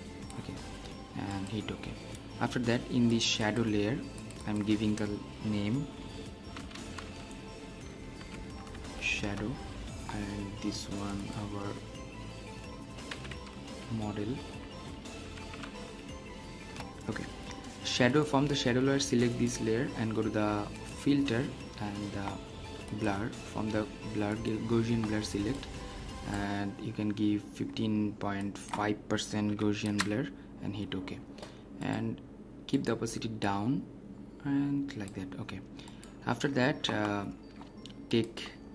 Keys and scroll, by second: 1.1 typing, 9.2 Return, 16.6 Return, 29.8 Return.